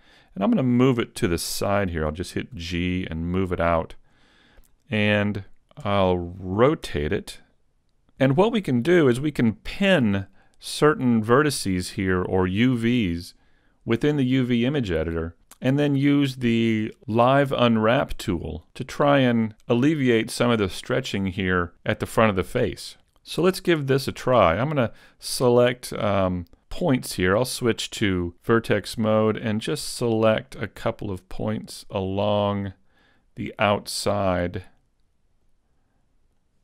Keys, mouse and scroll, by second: 2.6 shift+middle click, 2.6 g, 5.5 click, 5.9 r, 25.8 right click, 29.1 click, 29.1 right click, 30.0 shift+right click, 31.1 shift+right click, 31.9 shift+right click, 33.9 shift+right click, 35.3 shift+right click, 36.3 shift+right click.